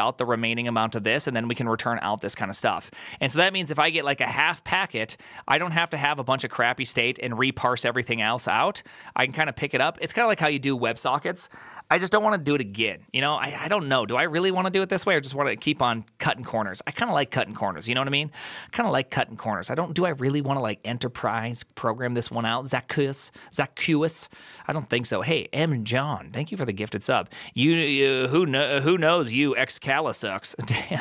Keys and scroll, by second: 14.1 alt+{, 14.1 alt++.